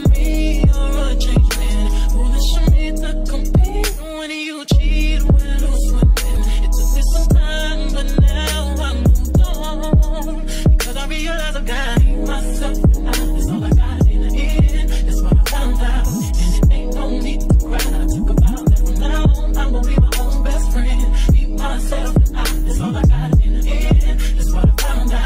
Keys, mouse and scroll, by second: 0.3-1.7 drag, 1.7-4.6 middle drag, 1.8 g, 4.6-5.9 drag, 5.9 middle click, 6.4-9.7 drag, 9.7-11.6 middle drag, 10.0 KP_1, 11.6 click, 12.2-13.2 middle drag, 12.4 g, 13.2 click, 14.2 middle click, 14.5-15.6 drag, 15.6 middle click, 15.9-17.7 drag, 17.7 middle click, 17.9-19.0 drag, 19.0 middle click, 19.2-20.4 drag, 20.4 middle click, 20.7 click, 21.3-23.0 middle drag, 22.3 g, 23.0-24.2 drag, 24.2 middle click, 24.5 click, 25.1 middle click.